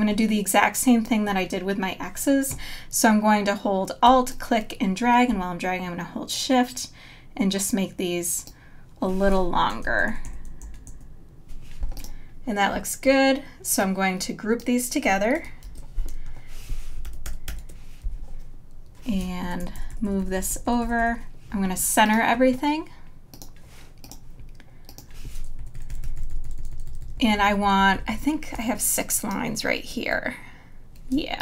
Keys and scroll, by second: 9.6 Right, 16.1 super+g, 18.0 super+-, 19.4 Left, 25.6 Up, 28.6 space, 31.1 space.